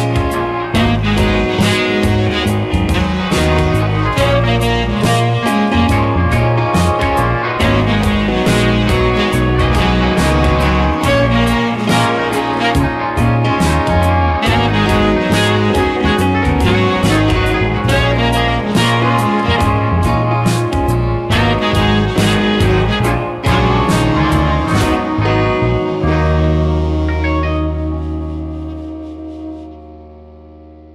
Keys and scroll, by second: 2.6 space, 3.9 space, 12.7 space, 21.4 space, 26.5 space, 28.3 space, 30.6 space.